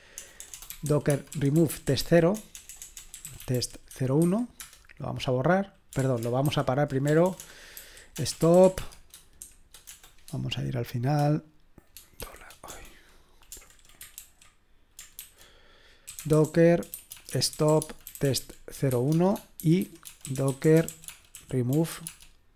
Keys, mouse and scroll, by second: 0.0-4.7 typing, 6.0 ctrl+p, 6.5 alt+b, 7.1-9.9 typing, 12.2-12.7 typing, 14.2 ctrl+r, 14.9-22.5 typing.